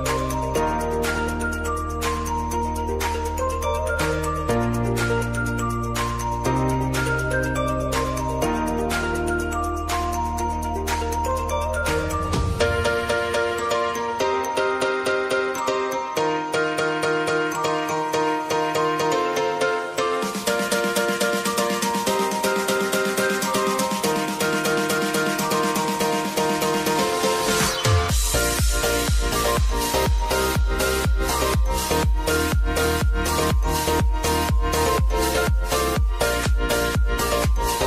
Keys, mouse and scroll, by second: 2.1 space, 2.5 click, 2.9 u, 3.9-5.6 scroll down 1, 5.6-8.4 drag, 8.4 =, 10.8-15.1 drag, 18.4 Return, 19.7 click, 20.0 space, 21.7 click, 22.8 space, 27.2 space, 27.9-30.9 drag, 30.9-32.6 drag, 32.6 space, 36.2 space, 36.8-37.8 drag.